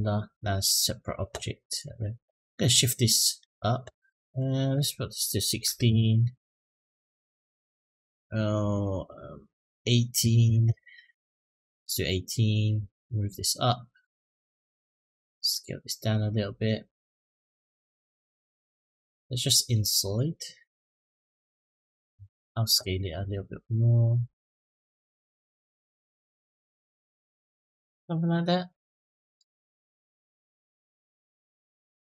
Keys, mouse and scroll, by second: 1.5 click, 4.1-5.7 drag, 8.4-10.5 drag, 12.7-14.7 drag, 15.1 s, 20.0 middle click, 22.1 click, 23.1-25.4 drag, 25.6-30.3 middle drag, 30.6-32.0 middle drag.